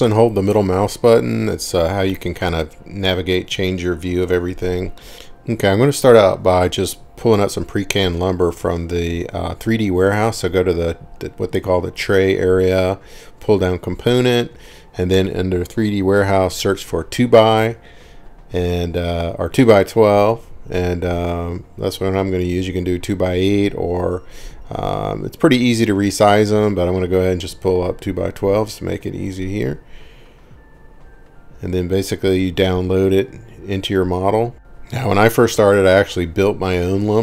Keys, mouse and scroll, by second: 0.2 middle click, 1.6 scroll, 2.3 scroll, 2.7 scroll down 3, 3.3 scroll, 5.2 scroll down 3, 6.0 middle click, 8.6 click, 11.2 click, 13.4-15.1 typing, 15.2 Return, 20.0 scroll, 20.9-23.0 scroll, 23.0-24.7 scroll, 24.8-26.0 scroll, 26.6 click, 30.5 click, 35.3-36.7 scroll, 36.7-37.2 scroll.